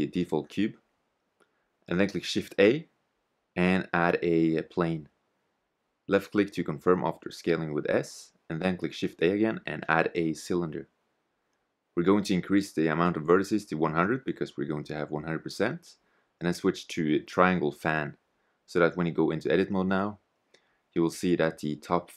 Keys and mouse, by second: 0.1 x, 2.6 shift+a, 4.4 s, 7.4 shift+a, 10.6-12.1 middle drag, 12.1-13.5 drag, 13.5 0, 17.6-20.5 middle drag, 20.5 Tab, 21.4-22.1 middle drag.